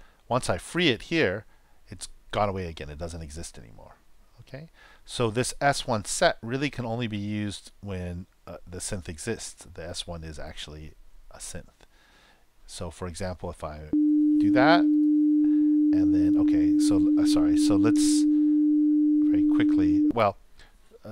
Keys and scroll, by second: 13.8 super+Return, 18.0-18.9 typing, 19.4 shift+super+0, 20.0 shift+super+..